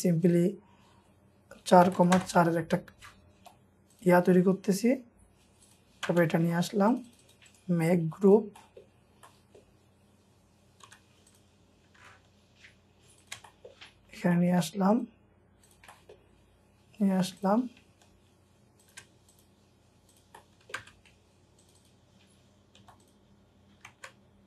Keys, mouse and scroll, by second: 1.4-3.4 typing, 5.9 scroll down 1, 6.0 typing, 6.4-7.0 scroll up 1, 7.0 double click, 7.5 right click, 8.5 middle click, 9.0 scroll down 1, 9.3 middle click, 9.9-10.8 scroll up 1, 10.6-12.0 typing, 11.0-12.0 scroll up 2, 13.2 shift+click, 13.5 shift+middle click, 13.8-14.3 scroll down 1, 14.3 shift+middle click, 14.7 scroll up 1, 15.9 middle click, 18.8 shift+click, 20.4 middle click, 20.8 space, 21.0-21.8 scroll up 1, 21.8 double click, 22.6 scroll up 1, 22.8 typing.